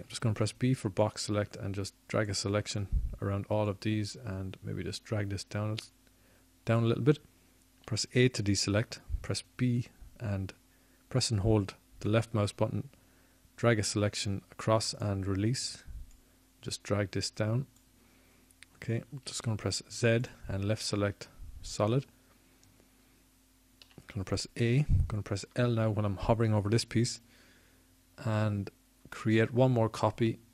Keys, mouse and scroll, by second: 1.0 ctrl+Tab, 5.1 b, 10.5 click, 13.0 a, 13.9 b, 14.2 click, 14.9 a, 21.3-23.2 drag, 23.2 middle click, 23.3 click, 23.4 middle click, 24.4 z, 26.1-27.6 middle drag, 29.0 a.